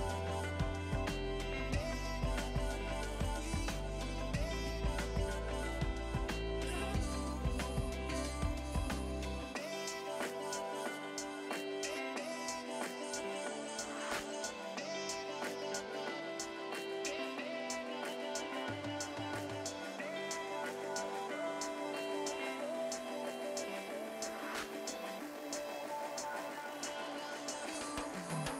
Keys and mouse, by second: 0.2 click, 0.4 Delete, 0.9 click, 2.7 click, 5.0 Return, 6.8 click, 10.1 Return, 11.7 click, 13.4 Return, 14.4 click, 15.5 click, 15.8 Escape, 16.4 Escape, 16.6 ctrl+1, 19.1 Return, 20.6 ctrl+1, 22.7 Return, 23.4 click, 24.8 Return, 26.6 click, 26.9 Escape, 27.0 click, 28.3 right click.